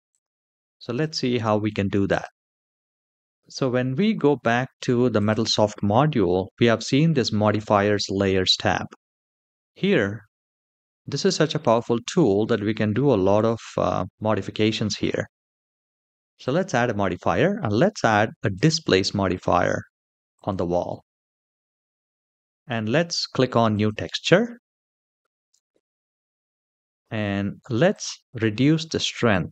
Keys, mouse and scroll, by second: 0.7-2.0 drag, 3.4 shift+middle click, 3.4 scroll down 2, 3.8-4.6 scroll up 2, 5.0 click, 16.1-20.4 drag, 23.4 click, 24.6-26.5 scroll down 4, 26.5 scroll down 1, 27.6-29.4 drag.